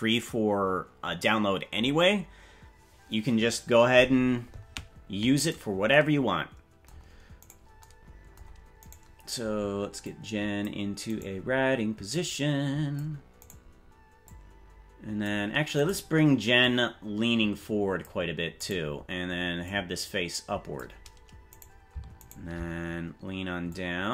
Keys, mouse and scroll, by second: 5.6 right click, 7.6 right click, 8.9 right click, 10.0 click, 11.2 right click, 12.1 click, 13.5 right click, 14.2-15.2 drag, 15.9 right click, 16.5-18.0 drag, 18.7 right click, 19.6-20.8 drag, 21.7 right click, 22.3 shift+right click, 23.6-24.1 drag.